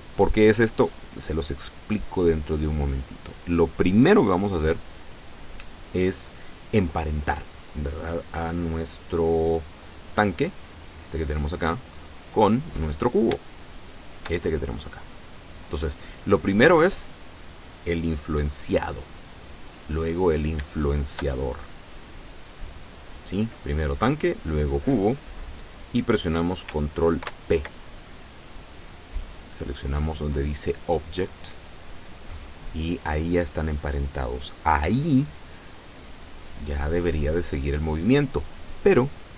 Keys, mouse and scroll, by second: 10.5 right click, 11.5-12.0 scroll up 2, 14.0 shift+right click, 16.3 right click, 20.9 shift+right click, 27.3 ctrl+p, 31.4 click, 36.1 scroll down 2, 36.8 scroll up 2, 37.2-37.6 scroll down 2.